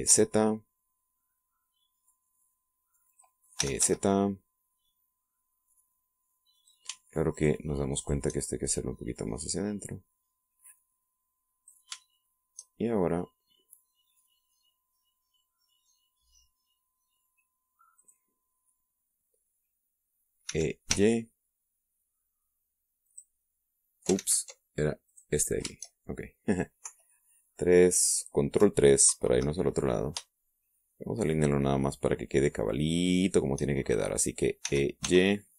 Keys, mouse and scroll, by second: 0.8 e, 1.1 z, 4.1 click, 4.6 e, 4.8 z, 7.6 click, 8.3 shift+right click, 8.6 shift+middle click, 9.0 shift+right click, 10.2-12.9 drag, 13.2-17.1 shift+middle drag, 19.0 right click, 21.5 e, 21.9 y, 24.1 click, 24.4 middle click, 25.2 ctrl+z, 26.1 right click, 27.9 KP_3, 30.1 ctrl+KP_3, 31.4-34.6 shift+middle drag.